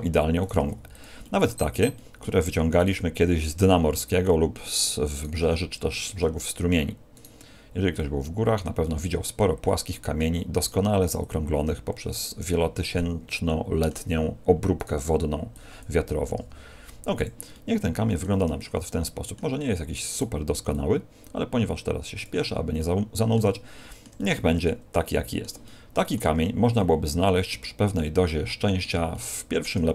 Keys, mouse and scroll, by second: 0.5 g, 1.9 middle click, 2.7 right click, 2.9 g, 3.7 click, 5.1 right click, 5.4 g, 5.9 click, 7.9 click, 9.6 middle click, 10.5 right click, 11.1 click, 15.5 click, 16.3 r, 18.4 middle click, 20.1 right click, 20.7 click, 23.5 middle click, 24.1 middle click, 25.6 middle click, 26.3 Tab, 26.7 middle click, 27.5 middle click, 28.2 middle click, 29.1 middle click.